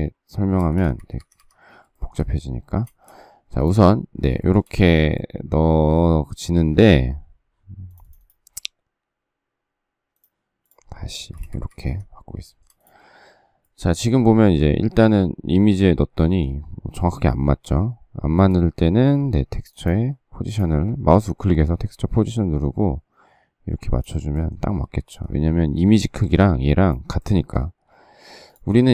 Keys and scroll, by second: 0.5 space, 0.7 Escape, 0.9 Escape, 1.2 Escape, 11.2 space, 11.3 Escape, 11.6 Escape, 11.7 Escape, 24.7 space, 24.9 Escape.